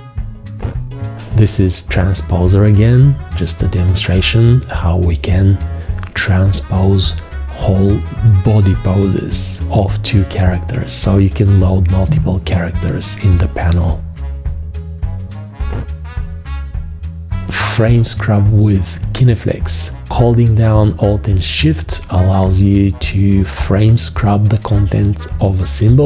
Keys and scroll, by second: 16.0 g, 16.5 F2, 19.1 g, 21.3 F1.